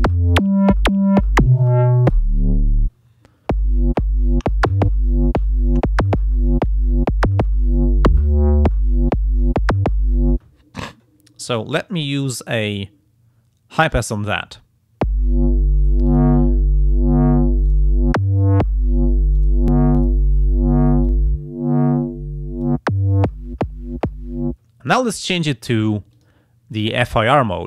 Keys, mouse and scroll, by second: 11.7 click, 13.9 click, 16.1 click, 17.7 click, 19.4 click, 20.0 click, 21.1-22.8 drag, 26.1 click.